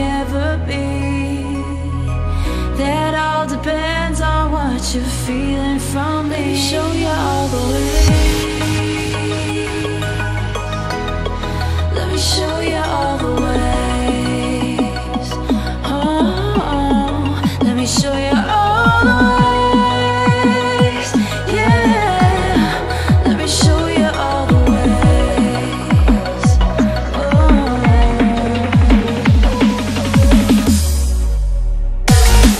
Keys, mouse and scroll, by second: 1.8-3.2 shift+drag, 4.6-5.7 shift+drag, 13.4 space, 13.6 click, 15.3 shift+click, 17.0-18.9 drag, 17.7-18.4 drag, 19.5 space, 20.7 ctrl+=, 21.0 space, 21.1 click, 22.6 space, 22.8 ctrl+-, 23.0 space, 23.2 click, 23.3 space, 24.1 click, 27.1-28.0 typing, 29.8-32.5 typing.